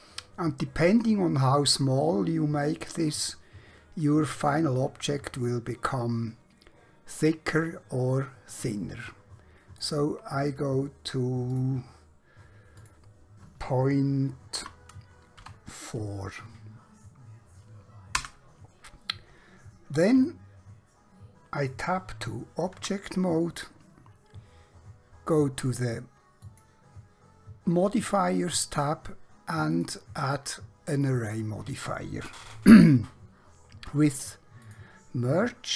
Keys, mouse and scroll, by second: 9.9 click, 14.6-15.4 typing, 18.2 Return, 20.4 middle click, 22.8 Tab, 26.4 click, 29.8 click, 34.6 click.